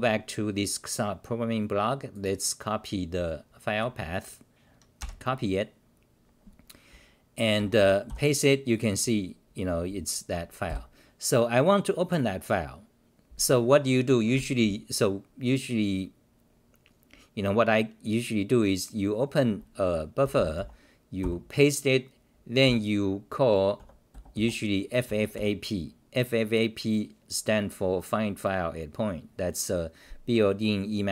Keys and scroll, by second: 7.5 Return, 7.8 Return, 8.0 k, 10.6 f, 21.2 k, 22.6 g, 23.8 a.